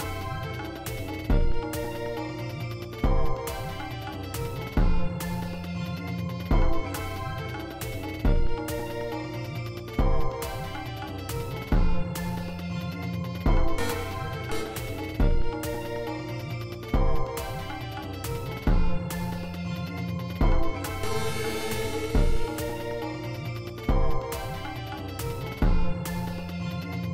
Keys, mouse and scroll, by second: 0.3-2.0 drag, 2.9 g, 3.7-6.0 drag, 8.1 d, 13.1 click, 14.3 click, 15.8 click, 17.3 g, 17.9-19.9 drag, 20.3 click, 20.7 space, 23.3 space, 24.4 g, 24.8 click, 26.4 space.